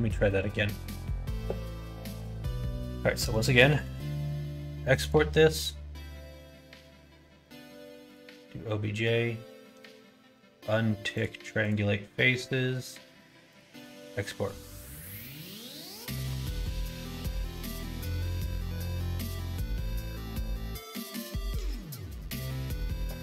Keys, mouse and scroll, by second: 3.2 middle click, 3.7 ctrl+s.